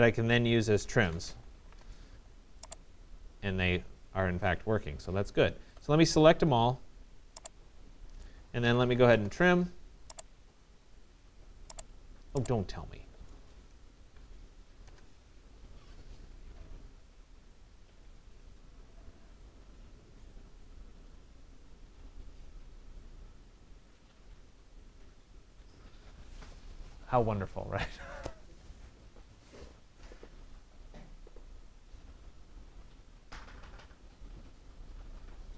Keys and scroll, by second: 1.3 Return, 5.0 Escape, 8.7 Return, 14.4 Return, 15.0 ctrl+alt+Delete, 17.3 alt+2, 17.5 alt+4, 17.9 alt+Return, 22.9 alt+3, 23.1 alt+7, 23.8 alt+BackSpace, 24.1 alt+6, 25.0 alt+Return, 27.9 alt+1, 28.0 alt+6, 28.4 alt+Return, 32.7 alt+Return.